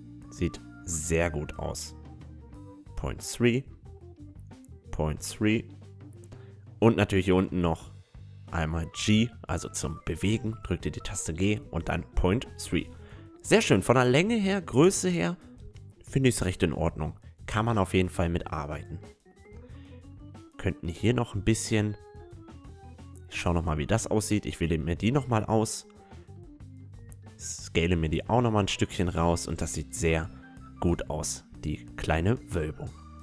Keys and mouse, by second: 1.3-3.0 right drag, 1.6 g, 3.7-6.2 middle drag, 4.5-6.2 drag, 4.7 g, 6.2 right click, 6.9-8.6 middle drag, 7.7 click, 8.6-10.5 right drag, 9.0 g, 11.6-13.2 middle drag, 12.1 Tab, 15.6-23.3 middle drag, 18.2 Tab, 19.4-21.2 drag, 20.1-22.0 right drag, 22.8 click, 22.8-25.0 right drag, 24.7 click, 24.7 middle click, 25.0-26.3 drag, 25.0-29.1 middle drag, 26.3 ctrl+z, 26.3 s, 29.2 Tab, 29.4-31.5 middle drag, 32.1 ctrl+z.